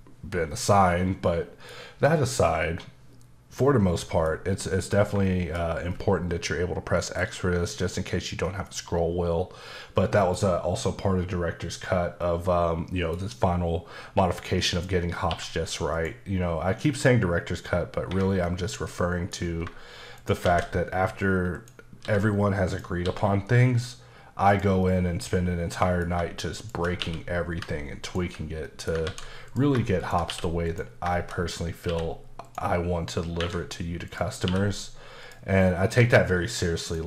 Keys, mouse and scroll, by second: 0.5 middle click, 3.5 middle click, 4.2 double middle click, 5.2 shift+middle click, 8.4 middle click, 12.2 middle click, 14.7 click, 15.3 q, 15.9 click, 18.1 Escape, 18.9 middle click, 19.4 scroll up 1, 20.2 shift+right click, 20.4 shift+a, 21.5 click, 22.0 s, 22.7 click, 23.0 s, 24.5 click, 24.8 middle click, 26.6 shift+click, 27.0 q, 28.0 ctrl+click, 28.7 middle click, 29.0 ctrl+z, 29.5 click, 30.0 shift+click, 30.3 q, 30.6 click, 31.1 shift+middle click, 31.3-31.8 scroll up 3, 31.8 q, 32.4 click, 33.4 Escape, 34.0 click, 34.4 q, 35.2 click, 36.8 click.